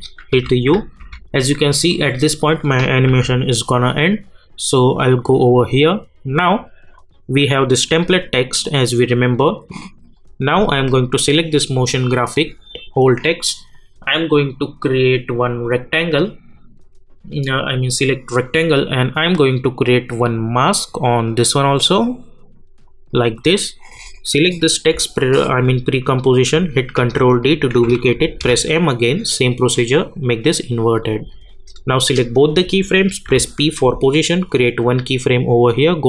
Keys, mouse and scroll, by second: 0.3-1.7 typing, 3.0 u, 5.0 click, 7.3 click, 13.7-15.6 drag, 19.1-24.1 drag, 26.9 ctrl+d, 28.4 m, 30.0 click, 33.3 p, 34.5-36.0 drag.